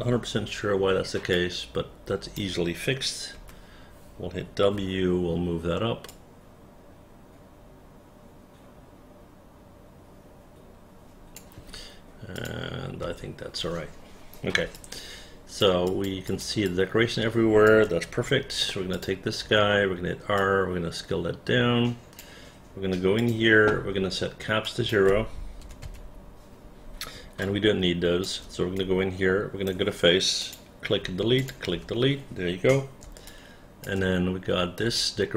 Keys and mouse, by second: 0.5 r, 1.5-2.5 drag, 3.5 4, 4.9 w, 6.2-11.5 drag, 12.5 click, 13.2 space, 14.9 alt+click, 16.0 alt+click, 16.4 alt+click, 16.8-17.8 alt+drag, 19.1 click, 19.6 r, 20.5-22.3 drag, 24.8 click, 25.7 KP_0, 25.9 Return, 27.6 alt+click, 28.9 alt+right click, 30.5 click, 31.1 Delete, 31.5 click, 31.8 Delete, 33.4 alt+click, 35.1 alt+click.